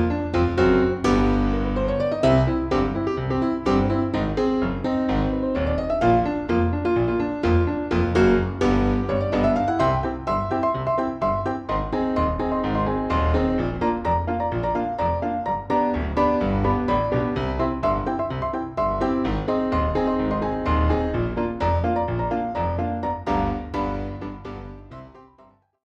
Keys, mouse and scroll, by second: 1.3 click, 2.8 click, 4.2 click, 8.9 shift+click, 9.5 shift+click, 10.4-11.4 shift+drag, 11.5 shift+click, 12.1 shift+click, 12.5 shift+click, 13.2 shift+click, 13.8 shift+click, 14.3 shift+click, 14.9 shift+click, 15.8 shift+click, 16.4 shift+click, 17.2 shift+click, 18.9 F1, 20.0 KP_Subtract, 21.5-22.9 drag, 23.6 click, 25.0 click.